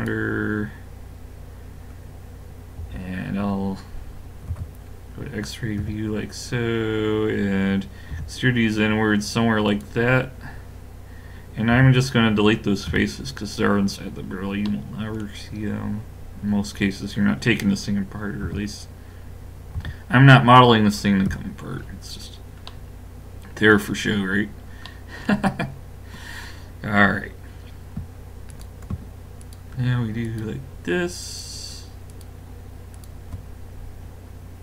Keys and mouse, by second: 2.8 KP_3, 4.5 z, 5.8 KP_5, 8.2 e, 11.7 x, 14.8-17.5 middle drag, 18.4 x, 19.8 z, 21.3 KP_5, 21.9 middle click, 24.5 middle click, 28.5-34.6 drag.